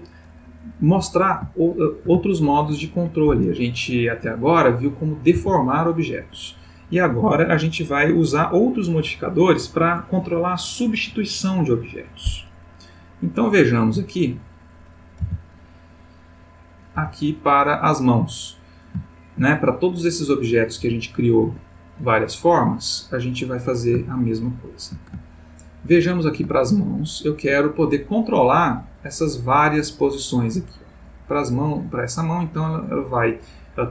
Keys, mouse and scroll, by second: 1.6-2.1 ctrl+middle drag, 2.3-2.8 ctrl+shift+middle drag, 4.7 click, 5.4 r, 6.2 Escape, 13.3 click, 15.2 r, 16.6 click, 17.0 g, 17.7 click, 18.2 click, 19.1-19.6 shift+middle drag, 20.1 click, 20.8 g, 21.4 Escape, 22.5 click, 23.4 click, 24.3-25.1 shift+middle drag, 25.3-26.2 ctrl+shift+middle drag, 26.7-27.6 ctrl+middle drag, 28.3 click, 29.4-31.7 drag, 32.5 click.